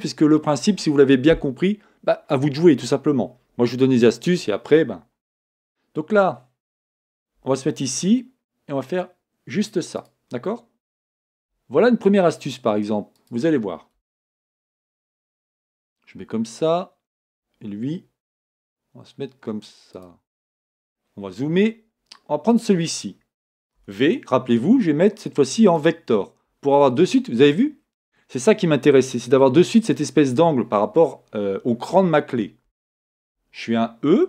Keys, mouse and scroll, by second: 17.3 click, 18.5 r, 20.4 scroll up 1, 22.7 click, 25.9 v, 27.8 scroll down 1, 33.3 e.